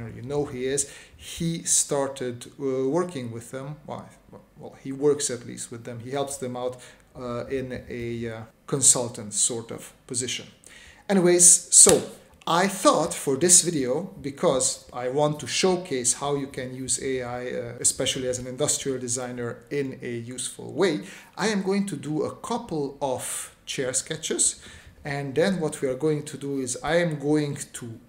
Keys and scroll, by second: 0.0 s, 2.5 space, 3.7 space, 4.2 s, 12.1 space, 12.9 space, 15.3 space, 16.9 space, 18.3 space, 19.4 space, 20.3 space, 21.5-23.6 typing, 25.1 space, 25.8 space, 26.5 space, 27.3 space.